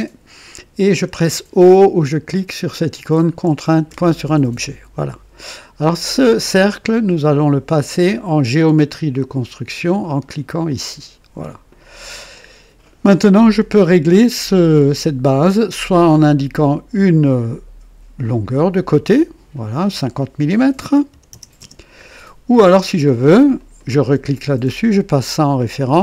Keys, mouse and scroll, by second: 3.9 o, 6.6 click, 10.6 click, 11.7 click, 16.9 click, 18.2 click, 21.1 KP_5, 21.3 KP_0, 21.6 Return, 23.5 click, 25.2 click.